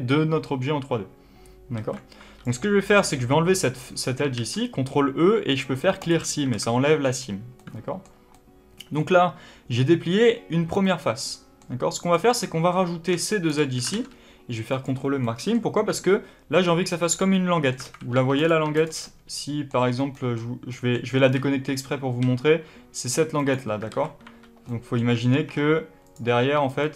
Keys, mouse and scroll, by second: 1.6 alt+a, 2.1 2, 2.3 click, 3.8-4.3 scroll up 1, 4.3 ctrl+e, 6.5 alt+a, 7.0-7.5 scroll down 1, 7.5-11.9 middle drag, 11.9 click, 12.3-13.4 middle drag, 13.4 shift+click, 13.8 ctrl+e, 15.1 middle click, 17.7 alt+a, 18.0 3, 18.3 click, 18.6 shift+click, 18.9 middle click, 21.1 y, 23.4 click, 23.8 alt+a, 24.1 2, 24.6-26.0 middle drag, 25.0 Tab, 26.0 click, 26.3 2, 26.6 click.